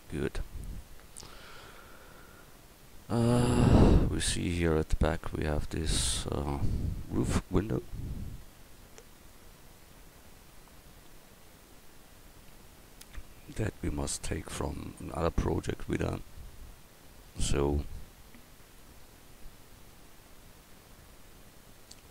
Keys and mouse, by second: 0.0 KP_1.